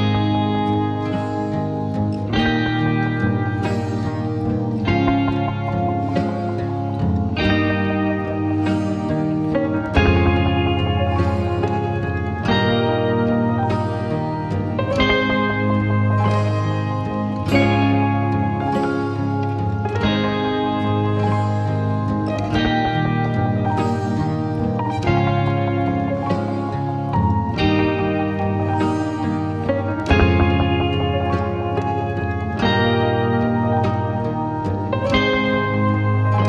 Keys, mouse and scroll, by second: 0.5 s, 2.0 click, 2.7 click, 3.7 s, 5.7 g, 7.1 Tab, 7.5-8.2 scroll up 3, 8.2 click, 8.6 2, 9.1 click, 9.8 shift+click, 10.2 shift+click, 11.0 shift+click, 11.8 ctrl+b, 13.8-16.1 drag, 16.1 Tab, 16.8 click, 17.6 r, 19.0 s, 20.9 g, 22.4 e, 22.8 r, 25.0 g, 26.3 click, 27.2 click, 28.8 click, 29.4 Tab, 30.0 click, 30.3 click, 30.7 3, 31.2 click, 31.4 click, 34.1 e.